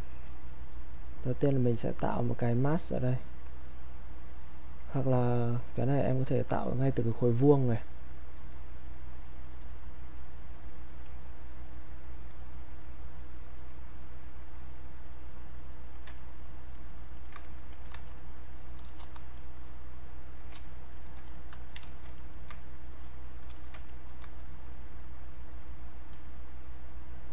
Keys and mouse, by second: 0.3 alt+click, 2.9-5.9 drag, 6.8-11.3 drag, 12.3 click, 16.1 ctrl+right click, 17.6 alt+click, 19.0 r, 19.6 click, 20.8 ctrl+right click, 21.3 click, 22.2 ctrl+right click, 22.9 click, 23.6 alt+click, 23.9 ctrl+right click, 24.6-27.3 ctrl+drag.